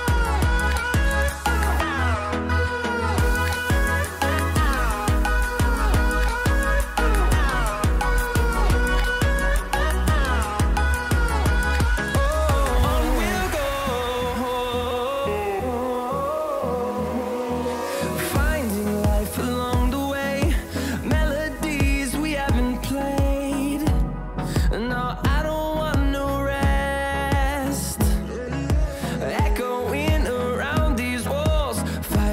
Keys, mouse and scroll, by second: 1.5 typing, 3.2 click, 3.2 typing, 7.7 typing, 8.8 click, 16.0 scroll up 1, 16.0 typing, 17.2-19.9 drag, 19.9-21.3 scroll down 1, 21.3 click, 23.7-24.1 scroll down 1, 26.2-29.9 drag, 26.7 typing.